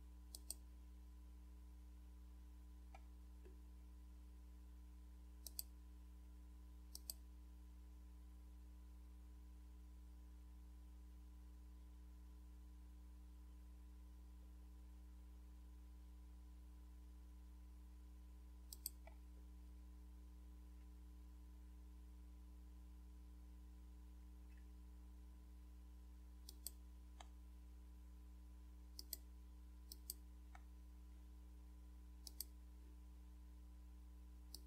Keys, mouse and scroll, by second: 0.3 click, 3.4 scroll down 1, 4.1 scroll down 1, 5.4 click, 6.9 click, 18.7 click, 26.5 click, 29.0 click, 29.9 click, 32.3-33.3 drag, 34.5 click.